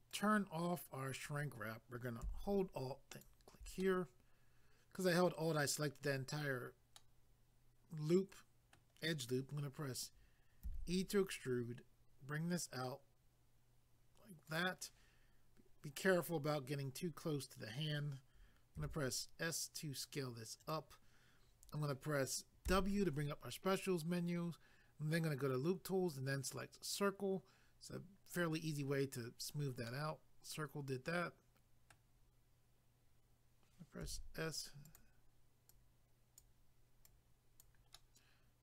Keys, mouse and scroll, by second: 0.1 click, 0.2 click, 3.1 alt+click, 3.2 alt+click, 3.8 middle click, 6.9 middle click, 10.9 e, 14.5 click, 14.6 click, 15.0 scroll down 1, 20.6 click, 20.7 click, 26.5 click, 26.6 click, 29.9 middle click, 34.8 click, 35.0 click, 35.7 click, 36.4 click, 37.0 click, 37.9 middle click.